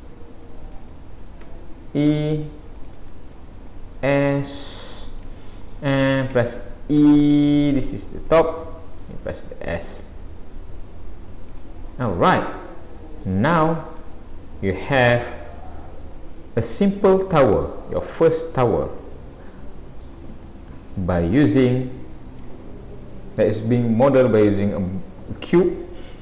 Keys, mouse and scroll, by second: 1.4 e, 3.4 s, 5.4 shift+middle click, 6.4 e, 9.0 s, 11.9-12.5 scroll down 4, 12.5 middle click, 13.9 click, 14.8 click, 15.5 middle click, 17.9-18.6 scroll up 5, 18.6 middle click, 20.2-21.5 scroll down 6, 20.9 middle click, 22.6 shift+middle click, 24.0 middle click, 25.9 middle click.